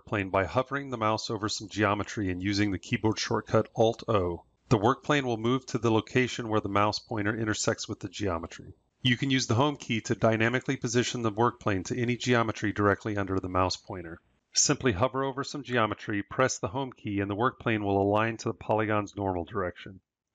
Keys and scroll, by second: 14.3 Home.